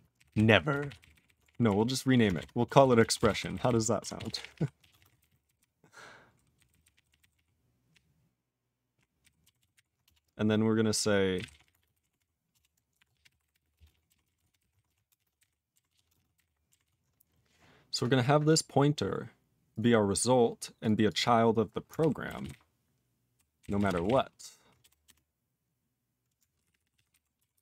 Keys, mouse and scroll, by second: 0.1 ctrl+k, 0.3 ctrl+k, 0.9 ctrl+s, 0.9 ctrl+n, 1.1 ctrl+n, 1.2 ctrl+n, 1.4 alt+f, 1.6 alt+f, 2.6 ctrl+BackSpace, 2.8 ctrl+s, 2.9 ctrl+a, 3.1 ctrl+space, 3.1 ctrl+e, 3.2 ctrl+g, 3.3 ctrl+n, 3.5 ctrl+n, 3.6 ctrl+n, 4.1 ctrl+s, 4.2 ctrl+p, 4.3 ctrl+p, 4.5 ctrl+p, 4.7 ctrl+a, 4.9 ctrl+space, 4.9 ctrl+e, 5.0 ctrl+n, 5.1 ctrl+n, 5.2 ctrl+g, 5.2 ctrl+e, 5.3 ctrl+n, 5.4 ctrl+n, 5.5-6.3 ctrl+n, 6.5 ctrl+n, 6.6 ctrl+n, 6.8 ctrl+n, 7.0 ctrl+e, 7.1 ctrl+n, 7.3 ctrl+e, 7.9-8.9 ctrl+p, 9.2 ctrl+n, 9.5 ctrl+s, 9.7 ctrl+e, 10.0 Return, 11.0-15.3 typing, 15.3 ctrl+g, 15.4 ctrl+n, 15.4 ctrl+e, 15.9 ctrl+s, 16.1 ctrl+space, 16.1 ctrl+a, 16.1 ctrl+p, 16.3 ctrl+g, 16.3 ctrl+n, 16.4 ctrl+e, 16.8 ctrl+s, 17.9 click, 17.9 click, 18.4 click, 18.5 click, 19.7 click, 19.7 click, 21.0 click, 21.1 click, 21.9 ctrl+k, 22.4 ctrl+s, 22.4-23.3 ctrl+n, 23.6 ctrl+n, 23.7 ctrl+space, 23.8 ctrl+n, 23.9 ctrl+n, 24.0 ctrl+e, 24.0 ctrl+n, 24.8 BackSpace, 25.0 BackSpace, 26.5 ctrl+p, 26.6 ctrl+p, 26.8 ctrl+p, 26.9 ctrl+p, 27.1 ctrl+k, 27.5 ctrl+s.